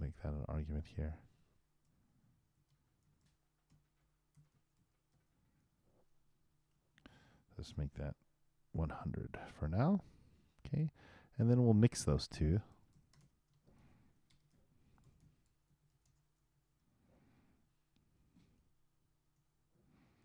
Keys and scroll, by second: 14.8-17.0 typing, 18.4 shift+], 19.3 shift+0.